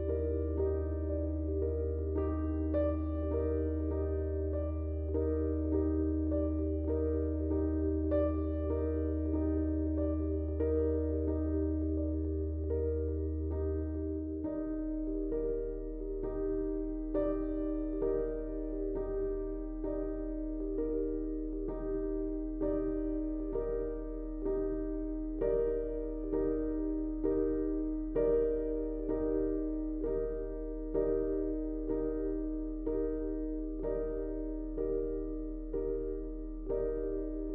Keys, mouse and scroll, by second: 6.4 click, 8.4-17.4 drag, 17.4 right click, 20.1 click, 21.9-24.7 drag, 24.7 right click, 25.5 click, 26.0 ctrl+a, 26.8 click, 29.5 click, 30.8 ctrl+a, 31.7 click, 35.4 click.